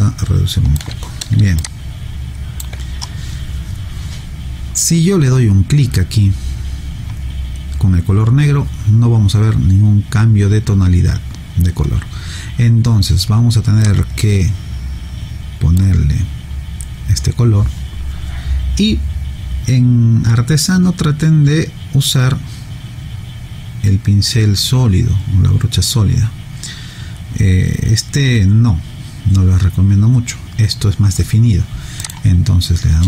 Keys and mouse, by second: 1.6 alt+click, 13.8 click, 32.0 click.